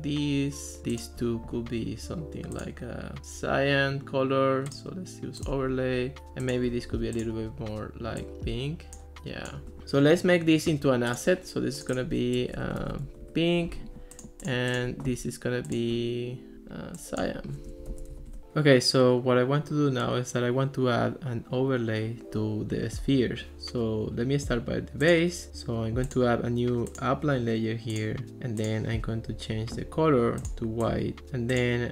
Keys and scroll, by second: 12.3-13.6 typing, 17.5-18.4 typing.